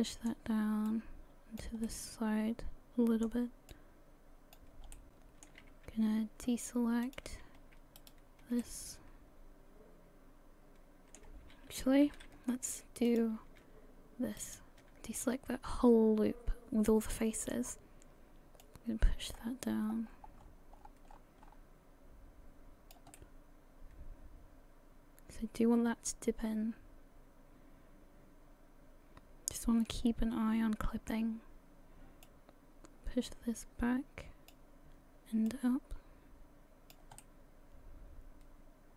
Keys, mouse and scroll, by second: 0.9 click, 1.9 middle click, 3.7 click, 4.9 middle click, 7.1 click, 8.0 alt+shift+right click, 8.6 middle click, 12.1 ctrl+z, 13.1 click, 14.4 alt+shift+right click, 15.2 middle click, 18.6 click, 23.2 middle click, 32.2 click, 35.5 click, 37.2 middle click.